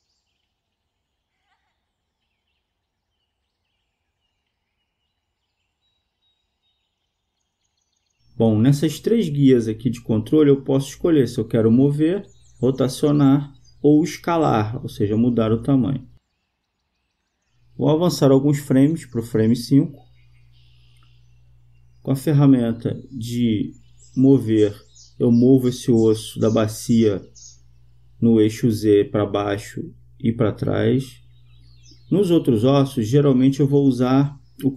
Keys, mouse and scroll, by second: 0.5-2.2 right drag, 3.2-4.2 right drag, 4.2-6.0 drag, 8.5-11.0 drag, 14.1-15.7 drag, 23.5-25.1 right drag, 25.3-27.0 drag, 28.2-29.7 drag, 31.1-32.5 right drag, 32.2 click, 32.7-34.5 drag.